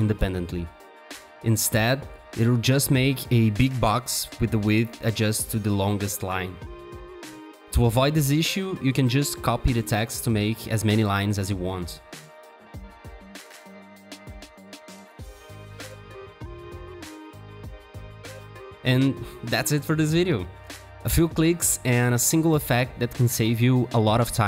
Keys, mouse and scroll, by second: 0.0-3.3 typing, 4.0 ctrl+Return, 7.0 t, 7.5 double click, 8.1 BackSpace, 9.2 ctrl+Return, 10.2 alt+click, 11.3 alt+click, 11.6 double click, 11.9-14.1 typing, 15.0 shift+click, 16.6 alt+shift+click.